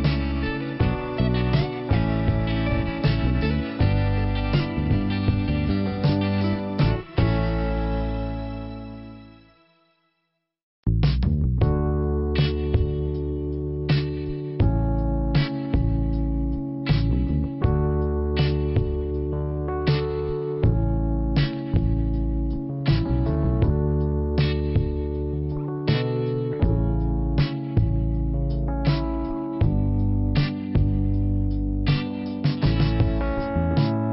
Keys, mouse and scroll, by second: 0.8 p, 1.7 scroll down 1, 5.5 scroll up 1, 7.3 click, 8.5 click, 12.7 click, 14.2 click, 14.3 click, 14.9 click, 15.7 click, 17.1 click, 17.7 click, 18.9 click, 21.6 click, 22.8 click, 24.4 click, 25.3 click, 28.3 click, 29.6 click, 32.3 click, 33.8 click.